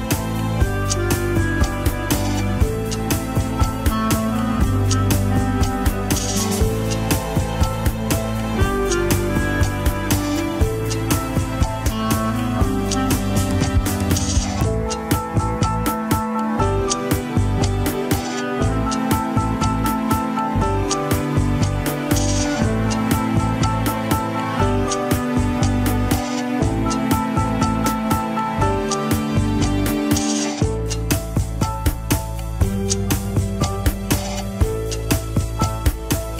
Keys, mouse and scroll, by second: 0.1 click, 0.5 middle click, 0.9 shift+click, 1.8 ctrl+p, 3.1 ctrl+z, 3.7 ctrl+p, 5.1 ctrl+Tab, 5.8 click, 6.7 shift+click, 7.6 click, 7.8 scroll down 1, 8.2-10.3 drag, 10.7-12.3 right drag, 12.3 click, 12.6 right click, 13.4-15.5 drag, 18.5 KP_1, 20.1 click, 20.4 middle click, 21.1 shift+click, 21.4 middle click, 21.7 Tab, 22.4 ctrl+p, 24.5 KP_1, 24.8 scroll down 3, 25.4 alt+z, 26.1 click, 26.8 click, 27.5 shift+middle click, 28.0 ctrl+Tab, 29.1 ctrl+s, 29.9 scroll down 3, 30.4 click.